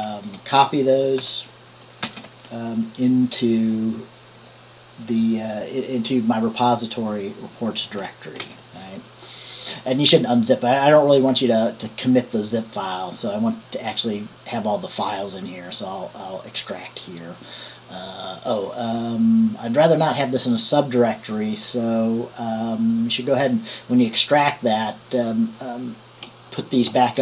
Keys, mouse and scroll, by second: 0.4 click, 2.2 ctrl+c, 5.8-6.8 drag, 7.5-8.6 drag, 8.6 ctrl+v, 9.1 click, 12.0-14.2 drag, 19.9 click, 24.7-25.6 drag, 25.8 click.